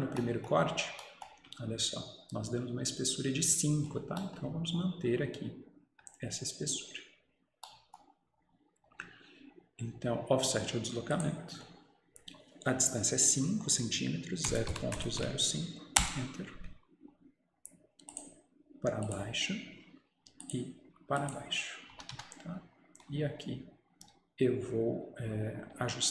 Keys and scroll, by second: 16.0 Return, 16.0 typing, 22.0 Escape, 22.2 Escape.